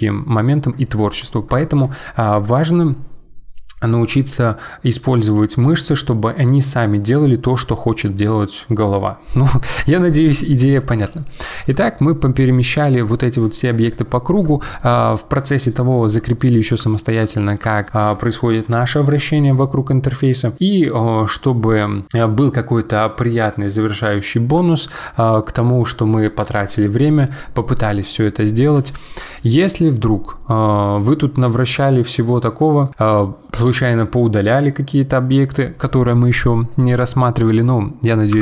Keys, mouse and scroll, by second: 1.7 click, 10.9 g, 12.2-20.5 middle drag, 31.0-33.5 middle drag, 38.3 Delete.